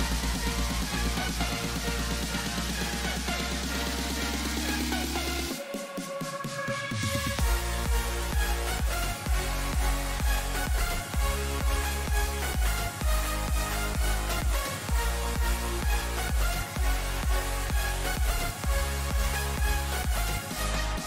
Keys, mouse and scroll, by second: 2.7 KP_3, 4.1 KP_7, 5.2-7.3 middle drag, 7.5-11.0 drag, 12.6-19.2 middle drag, 19.2-21.0 right drag, 19.9-21.0 middle drag.